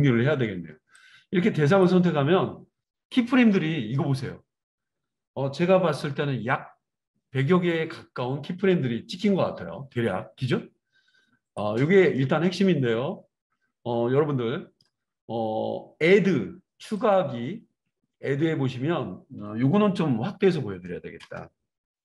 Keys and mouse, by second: 11.7-17.1 middle drag, 17.1 click.